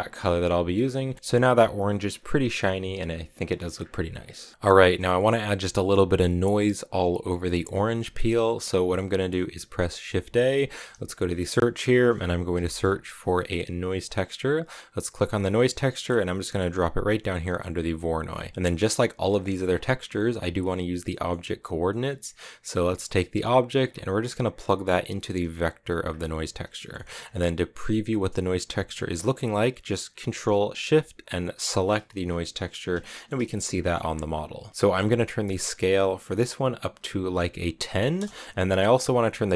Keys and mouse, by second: 4.2 middle click, 4.7 middle click, 7.9 middle click, 8.4 middle click, 9.1 middle click, 10.4 shift+a, 18.1 click, 19.2 click, 21.1 middle click, 21.9 middle click, 23.7-26.0 drag, 26.7 middle click, 31.7 ctrl+shift+click, 32.9 shift+click, 33.7 middle click, 34.6 middle click, 35.5-39.0 drag.